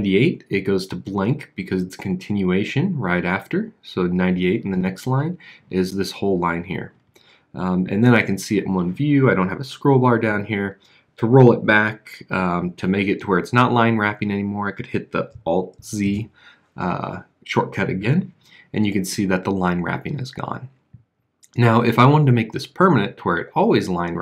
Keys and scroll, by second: 14.4 alt+z.